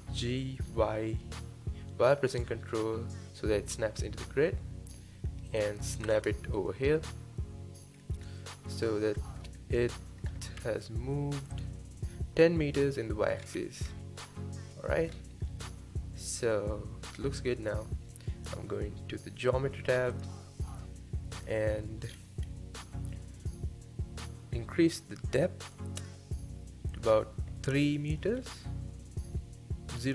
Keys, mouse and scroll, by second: 0.1 g, 6.7-7.9 middle drag, 7.9-8.4 scroll up 2, 8.4-9.4 middle drag, 9.4-10.6 scroll up 4, 10.6 n, 11.5 click, 13.4 scroll down 3, 13.9-15.1 middle drag, 15.1-15.5 scroll down 2, 15.5-18.5 middle drag, 20.1 click, 21.4 click, 22.1-24.3 scroll down 4, 25.7-28.7 drag, 29.9-30.1 drag.